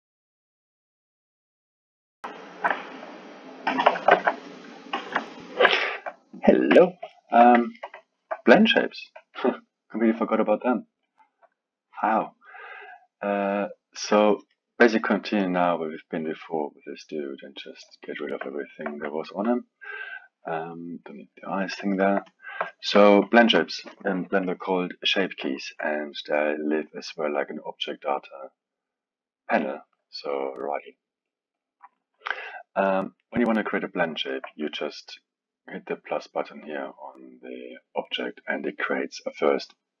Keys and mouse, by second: 5.7-6.7 middle drag, 6.7 KP_1, 7.1-9.9 alt+middle drag, 9.9-13.0 drag, 14.3-15.4 alt+middle drag, 15.4-18.5 drag, 18.5-19.8 alt+middle drag, 19.8 click, 21.1 click, 21.9 alt+middle click, 22.2-22.6 drag, 22.6-27.1 alt+middle drag, 27.1 click, 31.5-34.1 drag, 34.1-37.1 alt+middle drag, 38.1-40.0 drag.